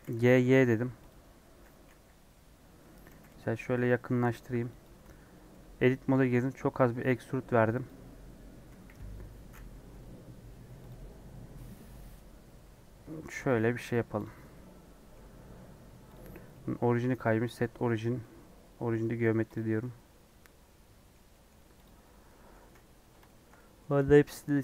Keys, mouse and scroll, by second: 0.0 g, 1.8 KP_1, 2.1 KP_3, 2.5-3.1 scroll up 4, 3.1 g, 4.9 Tab, 5.5 middle click, 6.2 a, 6.7 e, 7.9 Tab, 8.7 KP_1, 9.7 r, 10.9 g, 13.8 scroll down 1, 14.2 click, 14.3 scroll down 3, 14.5-15.5 middle drag, 15.5 scroll up 4, 16.1 click, 17.6 right click, 17.8 scroll down 5, 18.2 middle click, 18.9 scroll up 5, 19.6 scroll down 3, 19.8-21.8 middle drag, 21.8 click, 22.0 middle click, 22.5 a, 23.2-24.6 shift+middle drag.